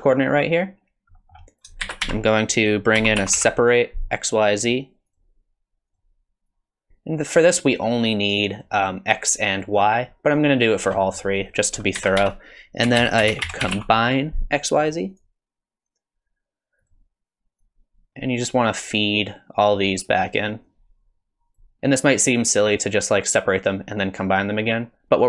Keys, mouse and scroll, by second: 1.2 middle click, 1.5 click, 1.8 shift+a, 6.5 click, 6.9 ctrl+shift+click, 8.5 ctrl+shift+click, 8.8 ctrl+shift+click, 9.5 ctrl+shift+click, 10.0 ctrl+shift+click, 11.0 middle click, 11.4 click, 12.0 shift+a, 17.6 click, 18.9 click, 20.6 click, 21.6 click, 21.6 middle click.